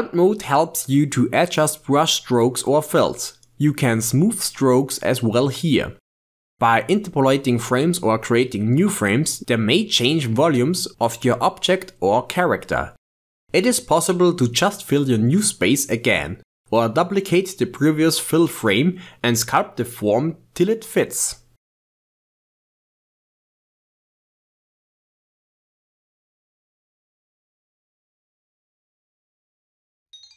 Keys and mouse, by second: 0.0 click, 0.7 ctrl+Tab, 1.3 click, 1.5 f, 1.7 f, 1.9-3.3 drag, 3.5-4.2 drag, 5.0-5.7 drag, 6.2 click, 6.7 ctrl+shift+middle click, 7.4-12.3 drag, 12.3 shift+middle click, 12.4 ctrl+Tab, 12.9 click, 13.7-15.2 drag, 15.2 ctrl+shift+middle click, 15.9 Tab, 16.0 x, 16.3 x, 16.6 click, 16.9 ctrl+shift+middle click, 17.4 click, 17.8 ctrl+z, 18.2-20.2 drag, 20.2 Tab, 20.4 shift+click, 20.5-21.9 typing, 20.9 click, 21.5 click, 22.1 Tab, 22.5-23.1 drag, 23.1 f, 23.2-24.3 drag, 24.3 f, 24.4-27.3 drag, 25.2 Left, 25.3 Left, 25.4 Left, 25.5 Left, 25.7 Left, 25.8 Left, 26.0 Left, 26.1 Left, 26.2-26.9 Left, 27.3 f, 27.4-28.6 drag, 28.6 f, 28.7-30.3 drag.